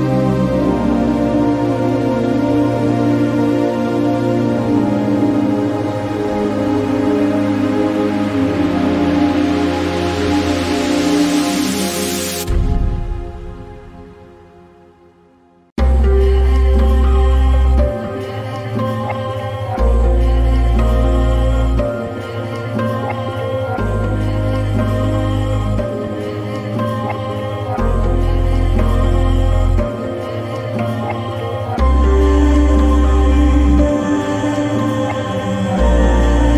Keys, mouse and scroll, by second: 0.0 right click, 1.0 click, 3.5 click, 5.0-11.4 ctrl+drag, 13.5-22.2 ctrl+drag, 23.8 click, 25.9 ctrl+t, 26.6 click, 28.9 click, 29.4 ctrl+r, 31.5 ctrl+r, 32.9 ctrl+t, 34.2 click, 34.3-36.5 drag.